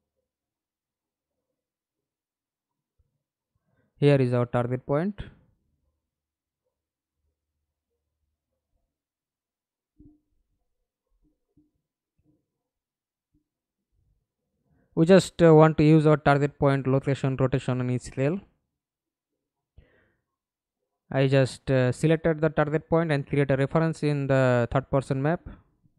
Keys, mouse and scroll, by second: 0.9 middle click, 1.5-2.4 scroll up 3, 5.8 f, 6.6 alt+click, 7.8-8.4 alt+scroll down 4, 8.9 alt+click, 13.4 BackSpace, 17.6 right click, 18.0 right click, 21.8-24.9 typing, 25.3 Return.